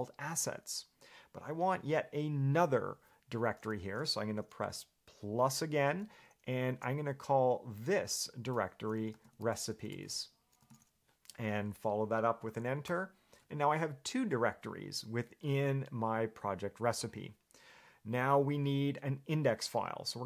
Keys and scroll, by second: 9.1-11.4 typing, 13.1 Return.